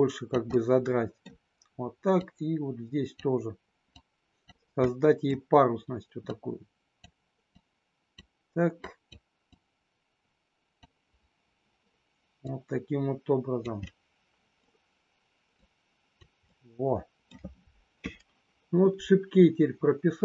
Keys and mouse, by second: 0.4 middle click, 2.1 click, 4.0 click, 4.8 middle click, 6.3 click, 7.6 click, 8.8 click, 9.6-10.8 drag, 12.4-13.6 drag, 13.7 middle click, 15.6 click, 16.4 middle click.